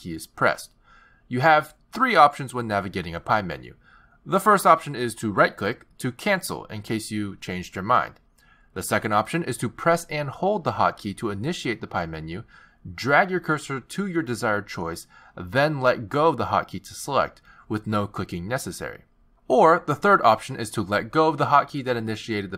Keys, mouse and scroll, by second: 4.0 z, 8.1 z, 21.2 z.